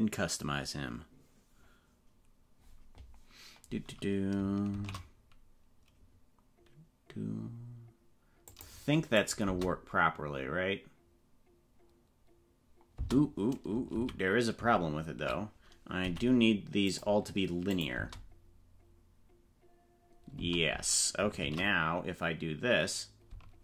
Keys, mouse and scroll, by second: 4.7 shift+d, 9.1 click, 9.4 space, 13.0 space, 14.1 ctrl+z, 14.8 ctrl+z, 16.0 t, 17.7 click, 17.9 space, 20.4 space, 21.4 shift+d.